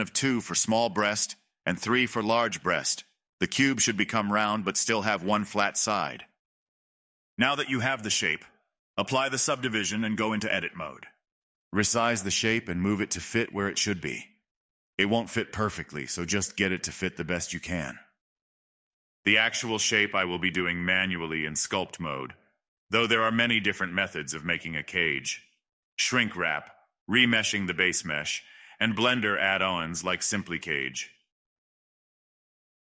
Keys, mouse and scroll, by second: 0.8 click, 1.3-4.5 middle drag, 4.5-5.4 drag, 5.4-7.3 middle drag, 7.3-9.5 drag, 9.5 a, 10.9 click, 11.4-11.9 scroll up 4, 12.0 shift+middle click, 12.4 scroll down 2, 12.9-14.0 s, 14.2 g, 15.0 g, 15.4 scroll up 7, 15.7 shift+middle click, 16.7-17.1 scroll up 3, 17.5-19.3 g, 21.3 click, 22.4 g, 23.8 g, 24.1-26.7 middle drag, 26.7 click, 27.4-29.6 typing, 30.9-31.8 g, 32.6-32.8 middle drag.